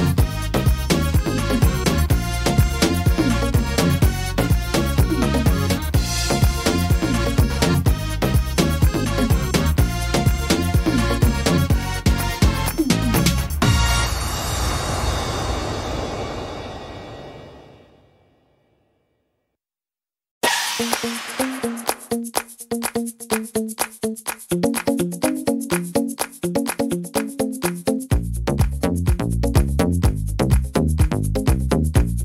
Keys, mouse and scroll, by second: 1.3 click, 2.7 click, 4.0 e, 6.5 click, 7.8 middle click, 9.2 e, 11.3 middle click, 14.2 click, 15.8 e, 18.3 middle click, 20.4 middle click, 24.7 click, 25.7 click, 28.7 middle click, 29.1-29.9 scroll down 2, 29.5 middle click, 30.0 scroll up 3, 30.5 shift+middle click, 30.9 scroll up 2, 31.3 middle click, 31.7 scroll down 1.